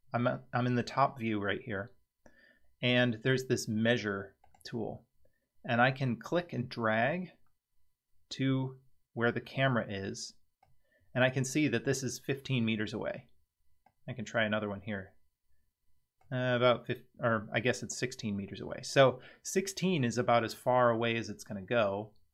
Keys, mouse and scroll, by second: 4.4 click, 6.3-10.6 drag, 13.8-16.2 drag.